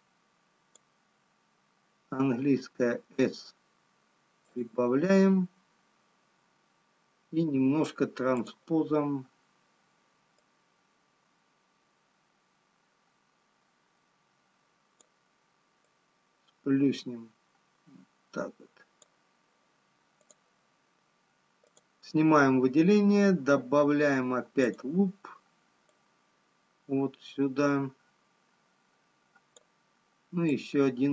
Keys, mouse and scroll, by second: 3.5 s, 9.1 click, 10.7 click, 17.5 click, 20.7 click, 22.4 click, 26.4 click.